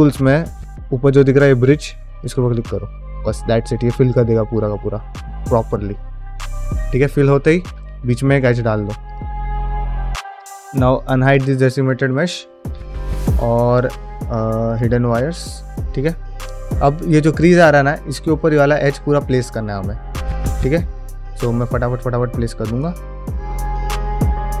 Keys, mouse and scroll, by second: 3.3 middle click, 3.8-6.2 middle drag, 6.5 scroll up 1, 6.8 middle click, 7.7 ctrl+e, 8.4 ctrl+r, 9.5 middle click, 11.0 click, 11.8 scroll up 1, 12.2 shift+middle click, 12.9-13.2 shift+scroll down 2, 13.2 middle click, 13.6 q, 14.8 scroll down 2, 15.1 shift+middle click, 16.1 1, 18.2 middle click, 19.2 middle click, 20.2 ctrl+middle click, 20.5 ctrl+alt+middle click, 20.7 middle click, 21.0 shift+middle click, 21.3 ctrl+space, 22.0 click, 22.4-24.6 typing, 23.1 click, 23.5 click, 23.8 shift+middle click, 23.9 click, 24.0 shift+middle click, 24.2 click, 24.5 shift+middle click.